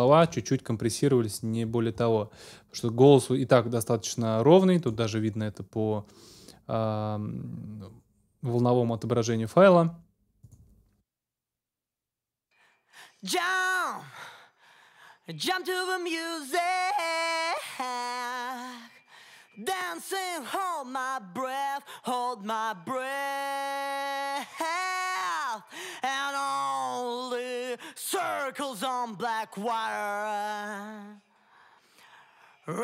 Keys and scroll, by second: 0.1 super+s, 11.2 space.